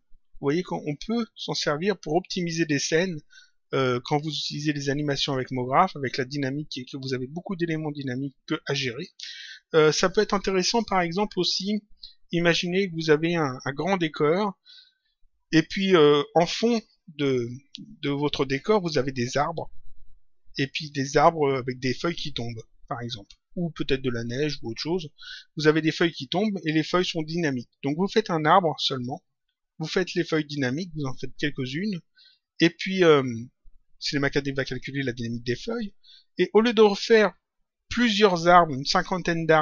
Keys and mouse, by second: 5.1 click.